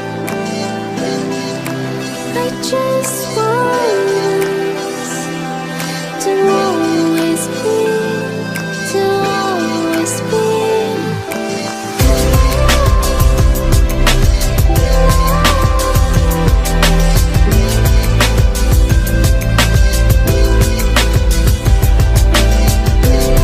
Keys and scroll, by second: 11.9 ctrl+e, 13.0 ctrl+j.